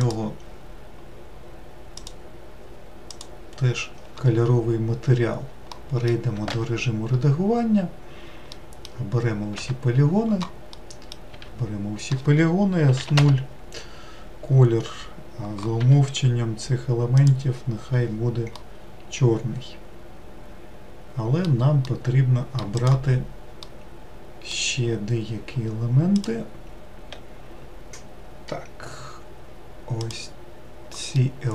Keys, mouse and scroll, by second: 3.2-5.8 drag, 5.8 middle click, 6.3 Tab, 8.3 middle click, 9.2 a, 12.6 s, 18.3-22.6 middle drag, 22.6 click, 23.5-26.0 middle drag, 26.0 click, 29.8 click, 30.9-31.5 middle drag.